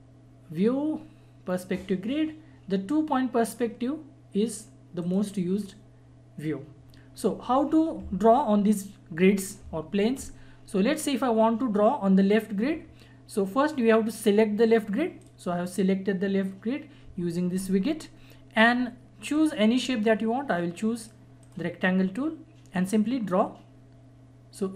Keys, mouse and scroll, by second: 5.0 click, 17.4 click, 19.3 click, 20.9 right click, 21.4-24.7 drag.